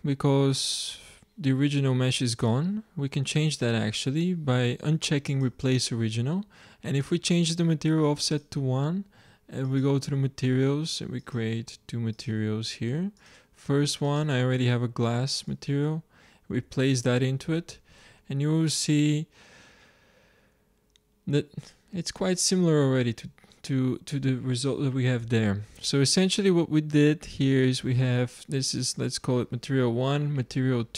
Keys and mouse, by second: 1.1-4.1 drag, 5.2-7.0 drag, 8.2-15.8 drag, 18.0 shift+z, 25.3 z.